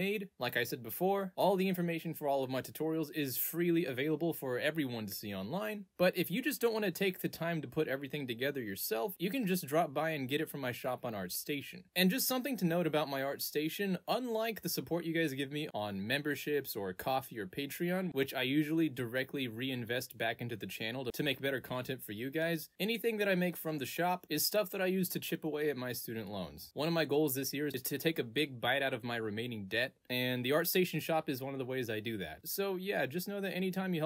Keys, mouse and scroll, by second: 9.0 click, 11.0 click, 13.9-15.3 middle drag, 15.6-18.7 middle drag, 18.7 click, 20.8 middle click, 20.9 scroll down 2, 22.0 middle click, 22.0 scroll down 2, 22.1-22.5 scroll up 2, 22.6-26.0 middle drag, 22.6-26.0 scroll up 2, 32.9-34.0 middle drag, 32.9-34.0 scroll up 1.